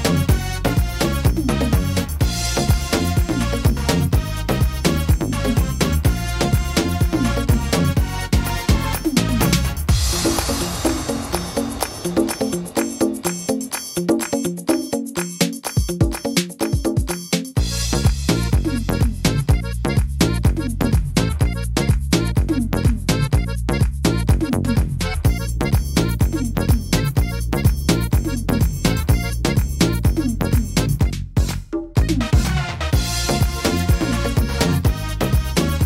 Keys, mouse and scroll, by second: 0.3 middle click, 2.3 s, 3.8 middle click, 5.4 click, 6.5 middle click, 7.9 s, 12.7 click, 12.7 middle click, 13.9 middle click, 14.3-14.8 scroll up 4, 14.7 middle click, 15.3 scroll up 1, 15.7 middle click, 16.3 right click, 17.3 shift+right click, 17.8 shift+right click, 18.5 shift+right click, 18.5 right click, 19.0 right click, 19.7 right click, 20.1 shift+right click, 20.4 shift+right click, 20.8 shift+right click, 21.5 shift+right click, 21.8 shift+right click, 22.2 middle click, 23.3 e, 24.4 middle click, 25.7 ctrl+r, 26.9 click, 27.8 middle click, 29.5 click, 30.4 right click, 30.8 shift+right click, 31.7 click, 32.8 middle click, 33.4-34.0 scroll up 3, 33.8 middle click, 34.2-34.8 scroll down 5, 34.8 middle click, 35.3-35.7 scroll down 3, 35.7 middle click.